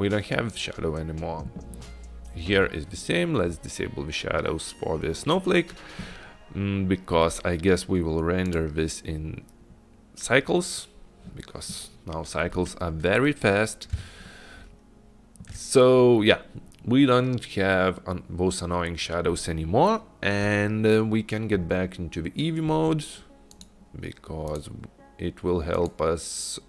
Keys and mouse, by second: 8.6 click, 14.3 shift+click, 23.6 click, 24.6 click, 24.8 click, 25.8 click, 25.9-26.6 drag.